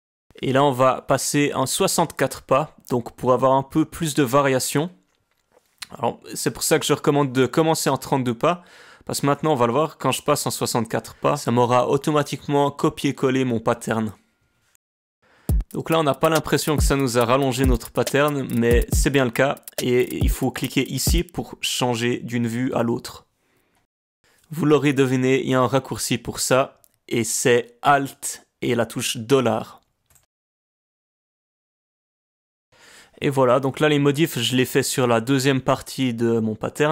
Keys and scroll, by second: 1.9 space, 15.4 space, 21.2 space, 28.3 alt+4, 31.1 alt+4, 31.4 space, 31.7 space, 32.1 space, 32.2 alt+$, 32.3 space.